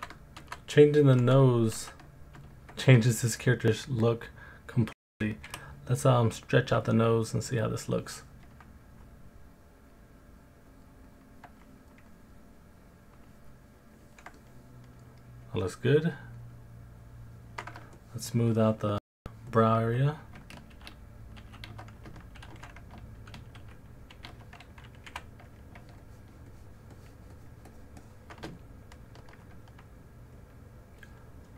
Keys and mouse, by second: 0.4 ctrl+z, 1.2 ctrl+z, 1.8 ctrl+z, 3.1 alt+click, 5.4 f, 6.5-8.5 drag, 10.3 click, 12.1 middle click, 12.3 alt+click, 14.4 middle click, 14.4 alt+click, 16.4 middle click, 16.4 alt+click, 18.1 shift+click, 18.5 shift+click, 19.2 shift+click, 20.7 shift+q, 21.4 shift+q, 22.5 alt+q, 23.6 shift+q, 24.1 shift+q, 25.1 f, 26.0 shift+click, 26.5 shift+click, 26.9 shift+click, 27.3 shift+click, 27.7 shift+click, 28.0 shift+click, 28.6 alt+middle click, 28.6 alt+click, 30.4 alt+middle click.